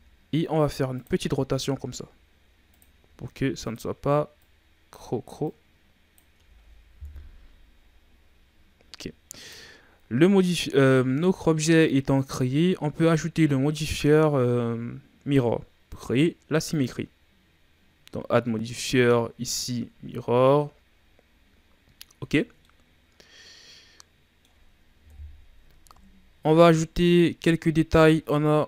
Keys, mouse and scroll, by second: 1.5 g, 3.0 r, 4.4-6.3 drag, 6.3 Tab, 7.0 KP_1, 7.8-8.8 scroll down 5, 8.8-9.3 scroll up 4, 9.3 right click, 10.9-12.5 shift+scroll up 3, 15.8 click, 19.0 click, 19.8-20.5 scroll down 3, 19.8 a, 21.2-22.4 scroll up 7, 22.4 scroll down 2, 22.6-25.0 middle drag, 25.0 KP_1, 25.8 KP_3, 26.8 ctrl+scroll down 2, 27.1 middle click, 27.5-28.2 scroll up 2, 28.2 shift+scroll down 2.